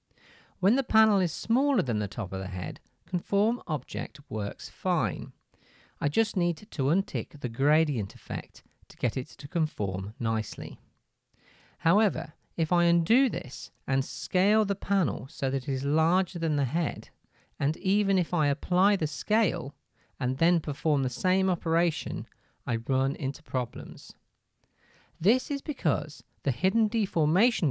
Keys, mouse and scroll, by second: 1.1 shift+click, 2.7-6.7 drag, 12.7 ctrl+z, 14.9 s, 16.9-20.8 drag, 21.8-27.7 drag, 24.5-26.7 middle drag, 27.5-27.7 shift+middle drag.